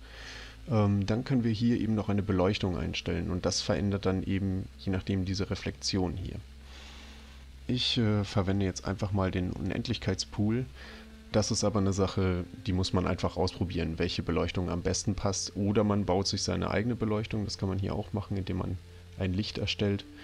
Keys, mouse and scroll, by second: 7.5 middle click, 9.6 click.